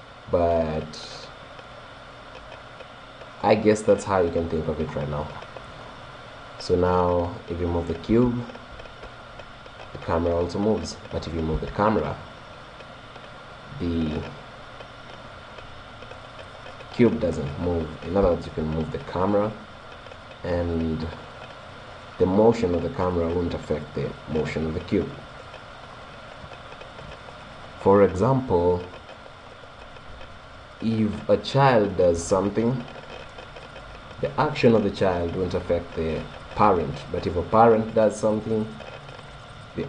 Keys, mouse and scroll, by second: 4.2-4.6 scroll up 1, 4.6-6.5 middle drag, 6.5-7.3 scroll up 1, 7.3 middle click, 8.1 g, 9.5-10.6 drag, 10.6-13.1 right drag, 11.6 g, 18.3 g, 21.9 right click.